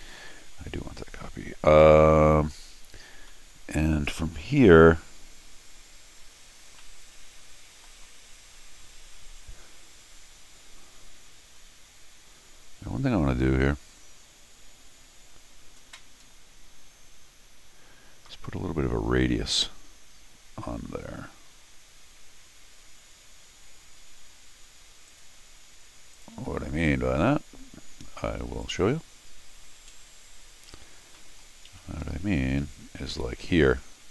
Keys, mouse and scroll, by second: 1.8 middle click, 2.7-3.2 scroll down 2, 3.3 middle click, 6.8-7.8 middle drag, 8.5 scroll down 1, 8.6 middle click, 11.5 middle click, 16.2 middle click, 16.8-17.8 middle drag, 25.1 click, 26.1 click, 28.6 click, 31.0 middle click, 31.8 `, 32.0 Escape, 32.2 Escape, 33.1 u.